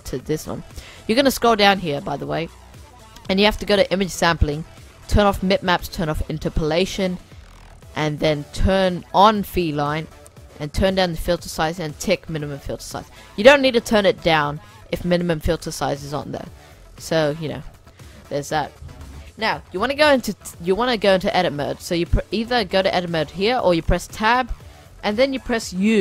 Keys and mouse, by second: 0.4-2.2 middle drag, 2.2-4.0 drag, 4.0-4.9 middle drag, 5.0-7.9 drag, 10.0-13.3 drag, 22.4-25.4 drag, 23.9 Tab.